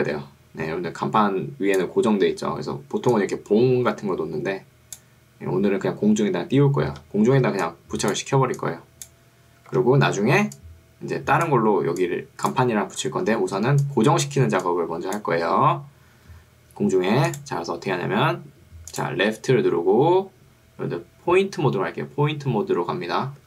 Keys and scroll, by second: 7.0 Escape, 7.6 ctrl+2, 9.8 Escape, 10.4 ctrl+2, 13.0 Escape, 13.6 ctrl+2, 16.2 Escape.